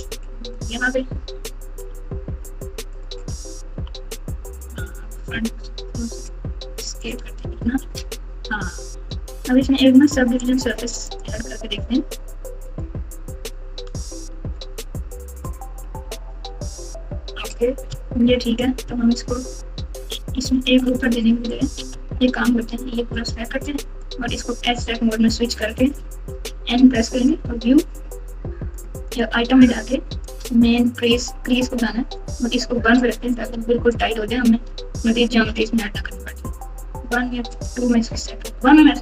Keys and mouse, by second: 1.8 g, 3.6 KP_3, 4.7 KP_1, 5.7 s, 7.4 Tab, 7.7 Tab, 10.3 click, 11.0-12.8 drag, 16.7 Tab, 18.3 ctrl+r, 21.9 alt+z, 22.6 click, 23.2 click, 23.4 click, 24.7 2, 26.2 n, 27.2 click, 28.7 click, 29.0 click, 30.3-32.1 drag, 33.3 click, 33.5 alt+z, 34.6 Tab, 37.5 click.